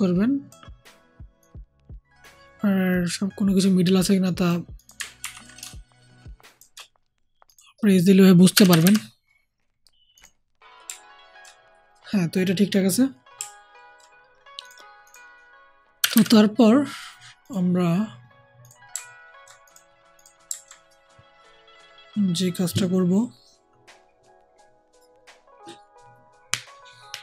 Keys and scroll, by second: 5.1 ctrl+t, 8.4 Down, 8.6 Down, 8.7 Down, 15.9 Down, 16.0 Down.